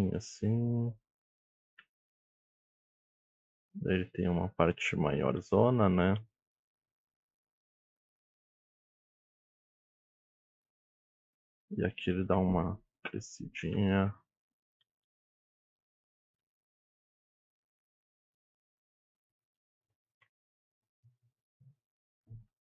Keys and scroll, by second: 1.8 e, 6.2 e, 7.9 ctrl+a, 8.6-10.7 typing, 9.0 ctrl+a, 11.7 ctrl+a, 11.8 e, 13.3 e, 13.6 ctrl+a, 14.0 e, 14.8 ctrl+a, 15.8 e, 17.6 e, 18.2 ctrl+a, 18.3 e, 18.8 ctrl+a, 18.9 e, 19.3 ctrl+a, 19.5 e, 20.5 alt+z, 22.5 g.